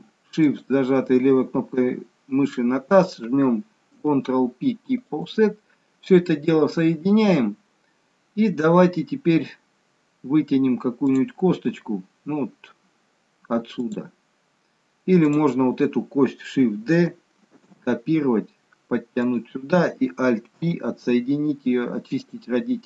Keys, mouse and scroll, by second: 3.9 ctrl+p, 11.2 click, 13.8 click, 17.6 shift+d.